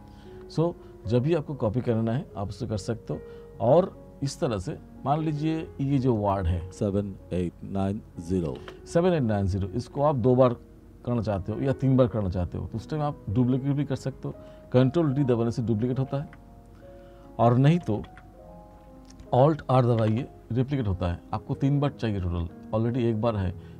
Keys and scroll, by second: 6.7 space, 8.7 space, 15.6 ctrl+d, 17.9 ctrl+z, 20.1 r.